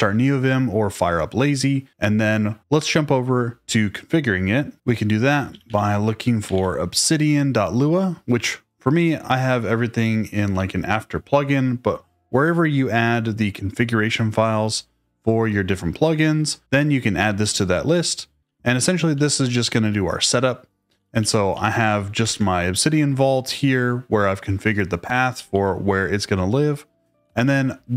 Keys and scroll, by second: 5.3-6.9 typing, 18.4-19.1 typing, 20.9-22.2 typing, 23.1 Escape, 25.3 typing, 27.1-27.4 typing.